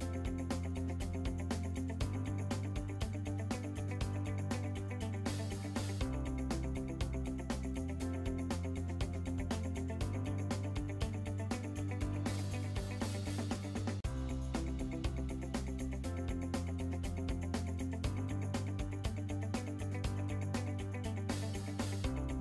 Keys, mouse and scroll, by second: 0.0-0.2 typing, 0.2 click, 0.8 click, 1.7 click, 2.2 click, 2.6 click, 3.7 click, 4.2-5.1 typing, 5.6 Return, 7.1 x, 7.3 click, 7.8 click, 9.2 click, 9.8 click, 10.2 click, 11.4-13.9 typing, 11.6 click, 13.3 Return, 14.1 click, 16.3 click, 16.8 click, 18.5 click, 19.1-22.2 typing.